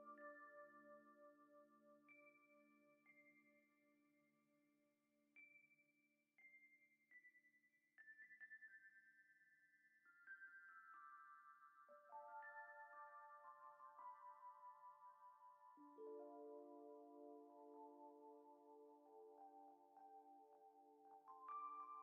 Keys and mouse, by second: 0.8 click, 1.6 middle drag, 1.9 click, 3.9 click, 4.7 click, 5.2 middle click, 5.7 click, 6.6 Tab, 6.9 middle click, 7.4 click, 7.7 click, 8.3 alt+shift+click, 10.5 alt+shift+click, 11.0 click, 13.2 shift+click, 14.6-15.1 drag, 15.2-16.8 drag, 17.1 ctrl+Tab, 17.8 click, 21.2-21.6 shift+middle drag.